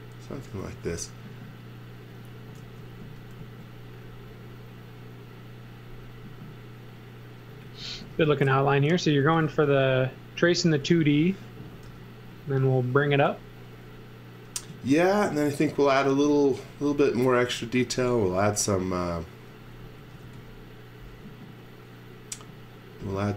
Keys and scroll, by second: 0.6 z, 2.6 e, 3.4 a, 7.6 x, 8.0 v, 9.2-11.9 typing, 14.7-18.3 typing, 19.8-20.7 typing.